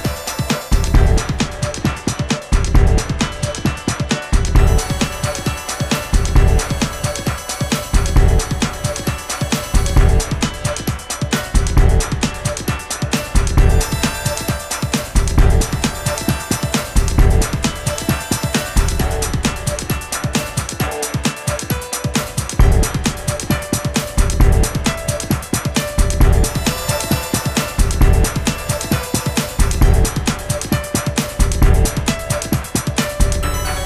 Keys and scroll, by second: 15.7 Down, 15.9 Up, 16.1 Down, 25.8 Left, 25.9 Left, 26.0 Up, 26.2 Up, 30.0 Left, 30.4 Left, 30.9 Up, 31.1 Down, 31.5 super+d, 33.5 super+d, 33.7 super+d.